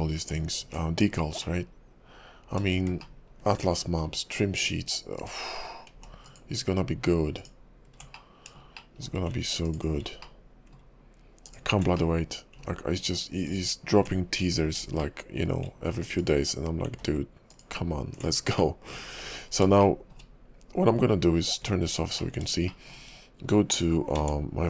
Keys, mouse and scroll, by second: 0.3 ctrl+click, 0.5 ctrl+click, 1.1-1.4 scroll down 3, 1.4 middle click, 3.0 shift+middle click, 3.7-4.0 scroll down 1, 5.1 ctrl+click, 6.1 ctrl+z, 6.2 ctrl+click, 7.3 ctrl+click, 8.1 middle click, 8.7 shift+middle click, 9.6 ctrl+click, 10.2 middle click, 11.4 ctrl+click, 12.0 middle click, 13.5 ctrl+click, 14.6 scroll up 4, 15.0 shift+middle click, 16.2 ctrl+click, 17.0 ctrl+z, 17.5 ctrl+click, 18.6 middle click, 19.2-19.7 scroll down 4, 19.8 shift+middle click, 20.9 Tab, 22.2 middle click, 22.7 shift+middle click, 23.0 shift+scroll down 1, 24.1 Tab.